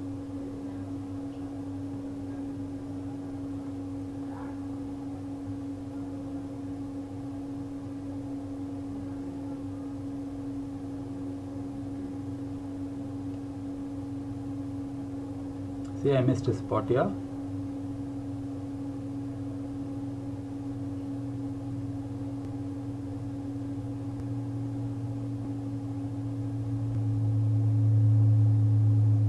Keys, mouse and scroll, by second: 2.6 click, 3.0 click, 7.6 click, 23.2 click, 24.0 click, 24.7 click, 27.8 click.